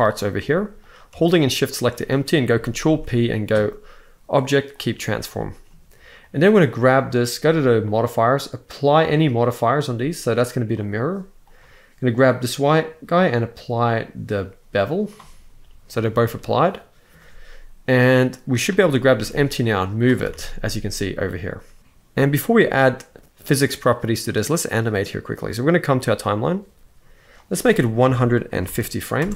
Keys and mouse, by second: 0.1 g, 2.5 ctrl+p, 5.1 middle click, 6.0-7.0 drag, 7.5 click, 8.6-10.6 drag, 11.2-14.9 drag, 15.7-16.8 middle drag, 18.3 click, 18.9 g, 19.9 r, 20.1 r, 21.0-21.8 right drag, 21.8 KP_1, 25.8 click, 27.1-29.0 drag.